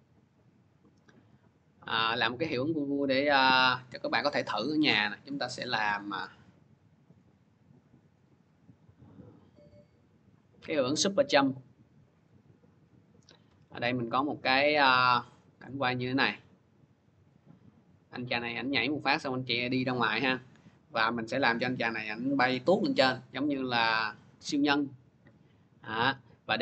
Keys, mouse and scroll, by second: 0.1 middle click, 1.6 middle click, 4.4 scroll, 5.3 scroll, 7.9-9.4 scroll, 9.6 click, 9.8 click, 12.0 click, 13.6 scroll, 15.5 click, 18.9-20.6 drag, 22.3-26.6 drag.